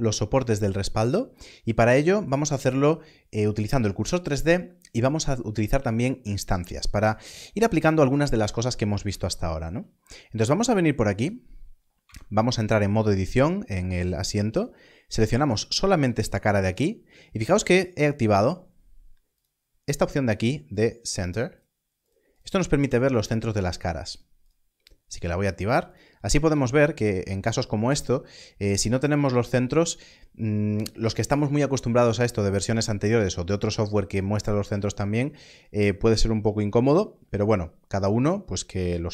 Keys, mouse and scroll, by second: 9.9-11.2 scroll up 1, 11.2 click, 12.0 Tab, 14.5 click, 15.8-16.1 scroll up 1, 19.3-20.1 scroll down 1, 22.0 click, 25.8 click, 26.4 alt+a, 29.6 alt+a.